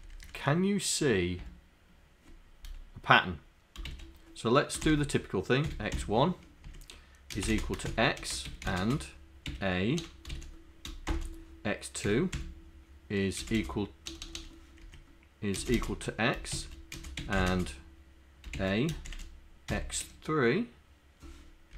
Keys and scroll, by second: 0.1 Up, 0.3 Up, 1.1 Tab, 3.9 shift+a, 4.9 shift+0, 6.0 1, 6.8 Down, 7.4-11.1 typing, 13.4 space, 13.5 =, 14.8 Down, 15.6-20.1 typing.